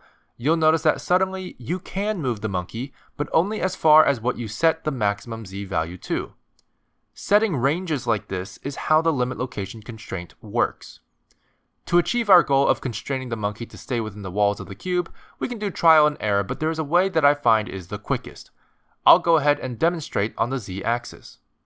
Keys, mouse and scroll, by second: 1.0 click, 4.6 g, 11.3 middle click, 16.2 middle click, 16.2 click, 19.1 scroll up 2, 19.8 shift+middle click.